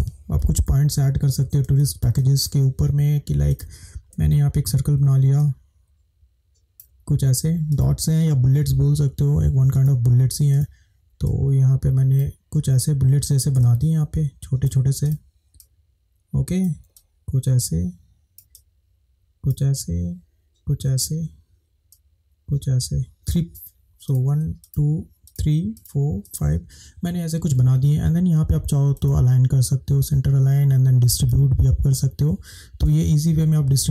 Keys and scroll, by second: 0.7 ctrl+=, 33.3 shift+Up.